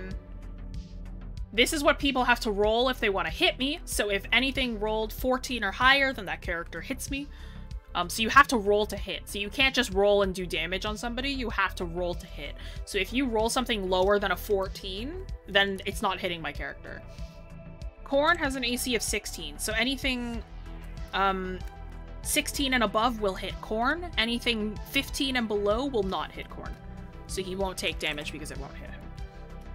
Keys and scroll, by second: 16.5-16.9 scroll down 1, 16.9-18.2 scroll up 1, 19.9 scroll up 1, 20.4 scroll down 1.